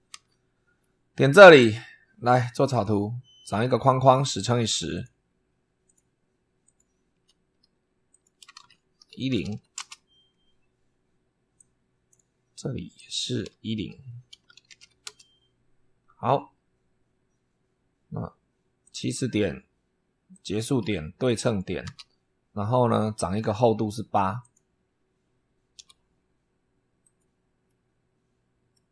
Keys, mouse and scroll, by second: 0.0 super+3, 0.7 middle click, 1.5 click, 2.6 click, 4.8 click, 5.7 click, 6.5 click, 7.0 Escape, 8.0 click, 8.5-9.9 typing, 11.5 click, 12.8 click, 13.9-15.2 typing, 18.7 click, 20.2 click, 21.3 click, 21.7 s, 22.8 click, 24.3 click, 25.6 8, 26.9 click, 27.5 middle click, 28.2 click.